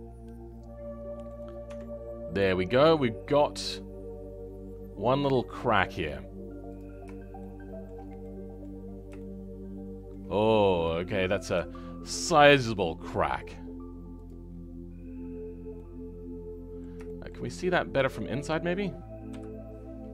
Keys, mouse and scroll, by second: 1.6 Tab, 2.7-6.7 middle drag, 6.7 click, 7.3-8.7 shift+middle drag, 8.7-9.1 scroll up 2, 9.1-14.2 shift+middle drag, 14.2 click, 14.5-15.1 scroll down 2, 15.1-15.7 scroll up 2, 15.7-17.4 middle drag, 17.4-18.0 scroll up 8, 18.2-19.3 scroll down 6, 19.3 KP_Decimal, 20.0-20.1 scroll down 11.